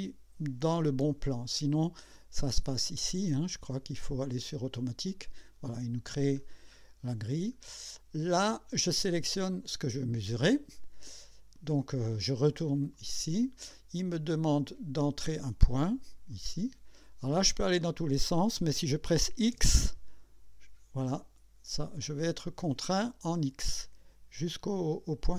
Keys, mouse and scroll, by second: 3.2 click, 5.1 click, 6.4-7.3 scroll up 2, 7.6 scroll down 1, 9.3 click, 12.9 click, 16.3 click, 19.5 x.